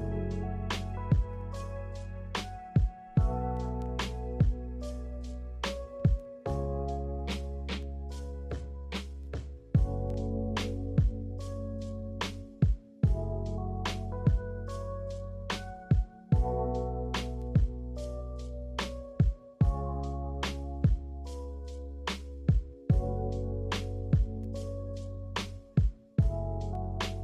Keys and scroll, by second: 6.6-7.8 typing, 11.8-12.5 typing.